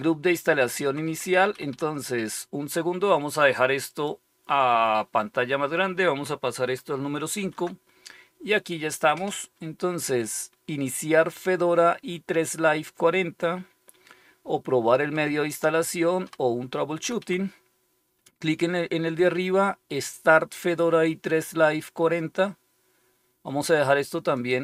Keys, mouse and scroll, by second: 0.7 Down, 1.2 Down, 1.4 Up, 1.6 Up, 3.8 click, 7.3 super+%, 14.9 End, 15.1 Down, 16.1 End, 16.3 Down, 16.9 Up, 17.1 Up, 24.2 click.